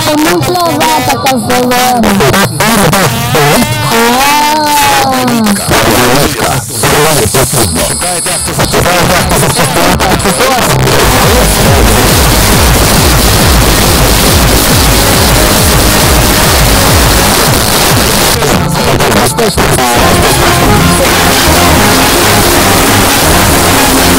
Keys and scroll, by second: 17.3 Page_Down.